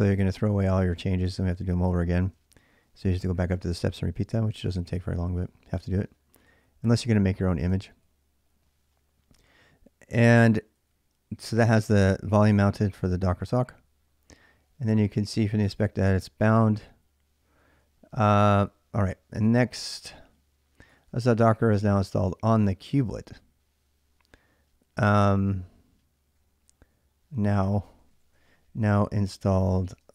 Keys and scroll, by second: 0.0-5.0 typing, 6.2 j, 7.5-22.6 typing, 26.1-30.1 typing.